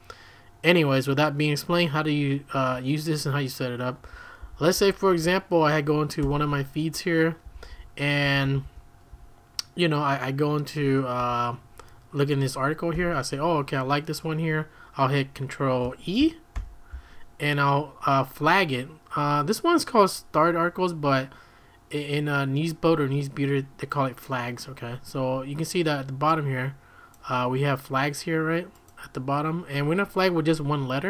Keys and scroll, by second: 3.8-9.6 typing, 11.2 j, 12.9 l, 16.5 ctrl+e.